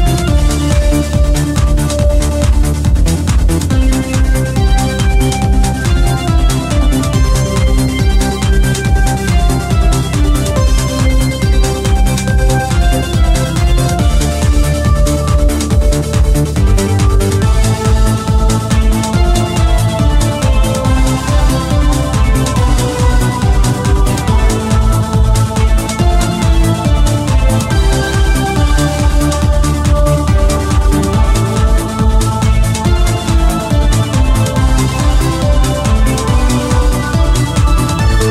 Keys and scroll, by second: 1.2 ctrl+z, 5.0 q, 14.9 q, 33.9 q.